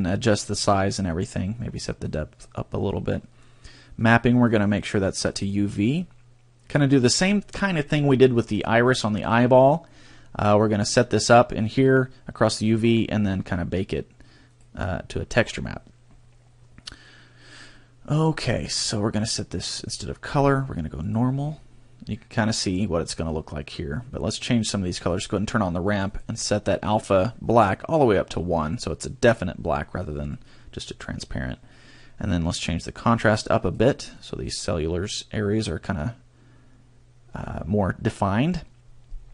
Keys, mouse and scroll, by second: 0.5-1.7 scroll down 3, 1.7 click, 2.0 click, 4.4 click, 5.8-6.1 scroll up 2, 14.5 click, 18.7-19.9 scroll down 1, 19.9 click, 19.9 scroll down 1, 21.0 click, 21.3-22.0 scroll up 4, 24.3 click, 25.1 click, 26.0 click, 33.2 click, 33.6 click, 33.9 click, 34.1 click.